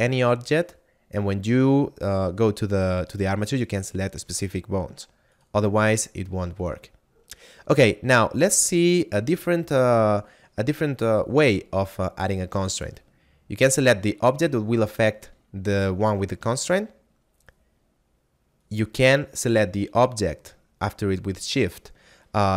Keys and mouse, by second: 13.4 right click, 18.3 shift+right click.